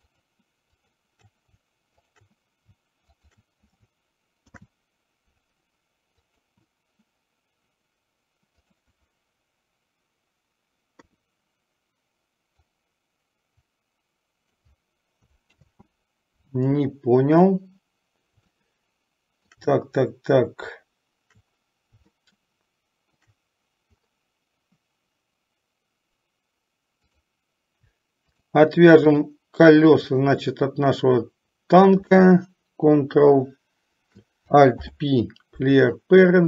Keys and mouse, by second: 0.2 shift+click, 1.0 shift+click, 3.2 shift+click, 4.7 ctrl+p, 8.7 click, 11.1 KP_3, 13.1-15.1 drag, 15.7 ctrl+z, 18.7-19.8 shift+middle drag, 22.3-23.5 shift+middle drag, 27.2 click, 28.4 shift+click, 29.4 shift+click, 30.2-30.6 shift+drag, 34.9 alt+p.